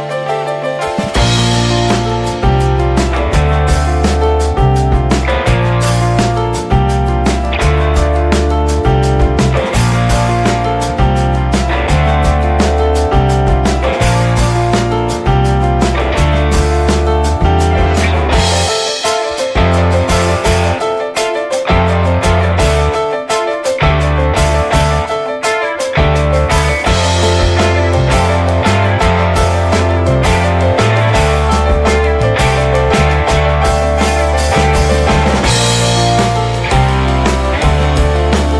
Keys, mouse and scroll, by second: 0.5-1.0 scroll down 1, 1.0 click, 1.2-2.3 middle drag, 2.3-2.8 scroll up 1, 2.8 shift+middle click, 3.5 click, 3.9-6.8 shift+middle drag, 6.8 click, 7.0 click, 7.9 shift+middle click, 8.3-8.6 scroll down 1, 8.6-10.5 shift+middle drag, 10.5 click, 11.0 click, 11.6 click, 12.1 click, 12.5 click, 12.7 click, 13.0 scroll down 2, 13.2-14.6 middle drag, 14.6 scroll up 3, 14.8 shift+middle click, 15.3 click, 15.4-16.5 shift+middle drag, 16.5-17.4 scroll down 1, 17.4 click, 17.7 scroll down 3, 18.0-18.4 shift+middle drag, 18.4 scroll down 1, 18.7-19.2 shift+middle drag, 19.2 scroll down 1, 19.5-21.9 shift+middle drag, 21.9 click, 22.9 scroll up 2, 23.1-24.0 scroll down 1, 24.0 click, 25.7 click, 26.0 scroll down 2, 26.3 shift+middle click, 27.0 click, 27.4 scroll up 2, 27.7 shift+middle click, 28.7-29.1 middle drag, 29.1 scroll down 2, 29.6 shift+middle click, 29.9-30.7 scroll down 1, 30.7 click, 31.3-31.6 middle drag, 31.6 scroll up 1, 31.8-32.3 shift+middle drag, 32.3 click, 32.5-33.2 middle drag, 33.2-33.5 scroll up 1, 33.5-34.8 shift+middle drag, 34.8 ctrl+s.